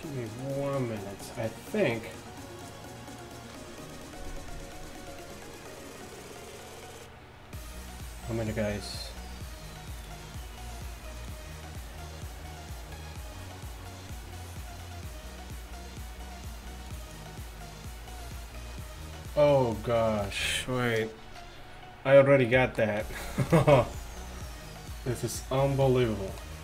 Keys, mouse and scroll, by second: 22.5-26.2 middle drag, 23.1 a.